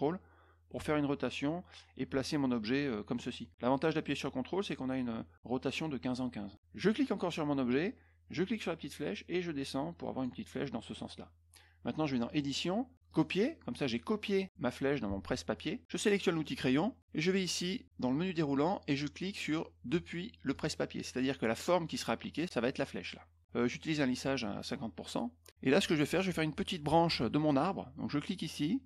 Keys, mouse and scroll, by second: 6.8 click, 8.6-10.2 drag, 12.2 click, 13.0 click, 16.3 click, 17.1 click, 20.5 click.